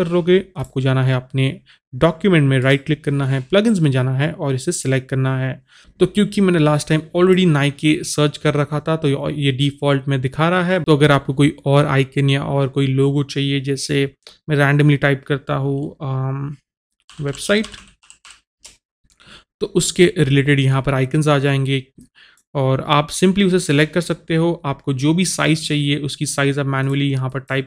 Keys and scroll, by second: 17.2-19.3 typing.